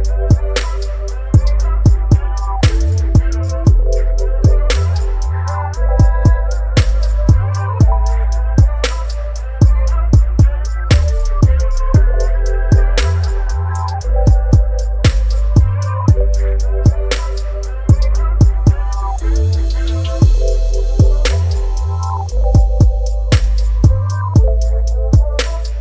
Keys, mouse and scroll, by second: 7.7 alt+click, 10.3 alt+click, 14.1 ctrl+alt+t, 15.8-25.8 alt+drag.